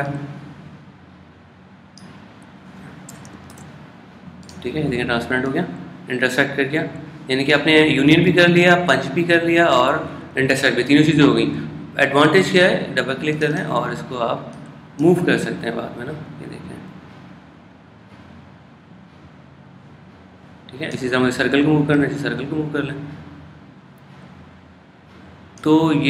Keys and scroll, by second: 4.5 shift+super+}.